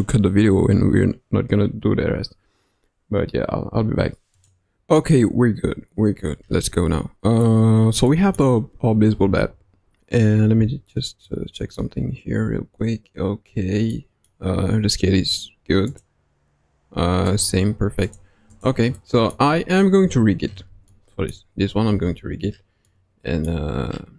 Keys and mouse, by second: 6.6-7.4 middle drag, 8.0 middle click, 8.8 KP_3, 9.3 KP_1, 10.5 n, 11.2-11.8 middle drag, 13.8 middle click, 17.3 click, 18.0-18.9 drag, 18.9 middle click, 20.0 KP_1, 20.8-21.3 middle drag, 21.8 KP_1, 22.8-23.4 middle drag.